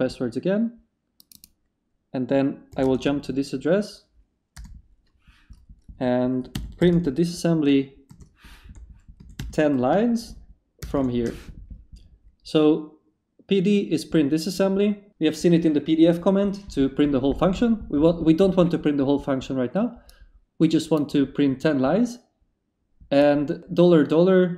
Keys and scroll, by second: 2.7 s, 2.8 space, 4.5 Return, 6.5-10.8 typing.